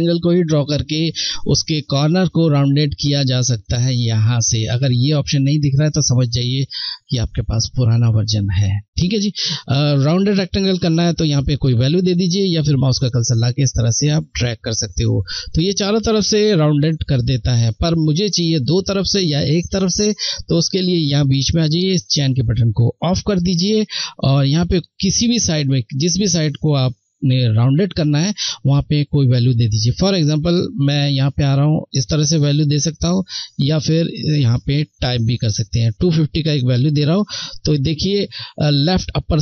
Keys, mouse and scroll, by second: 13.1 click, 13.1 click, 18.4 ctrl+z, 22.6 click, 30.9 click.